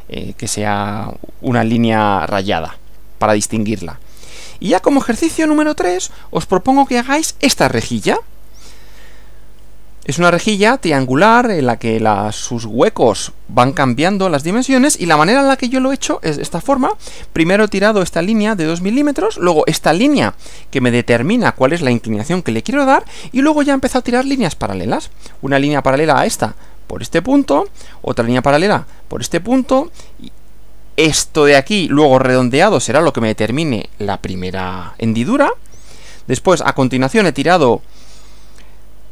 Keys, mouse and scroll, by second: 4.3 Right, 5.4 Right, 15.0 Right, 35.8 Right.